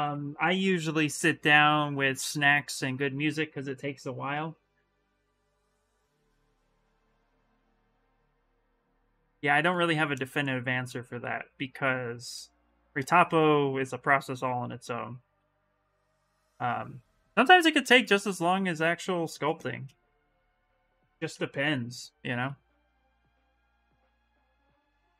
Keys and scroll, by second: 0.0-1.5 typing, 18.7 s, 20.5-22.0 typing, 24.6 s.